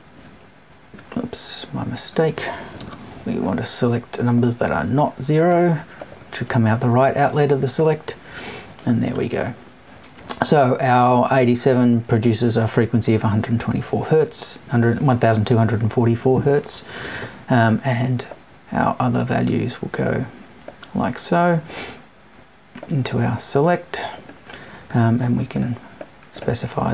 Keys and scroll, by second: 2.8 BackSpace.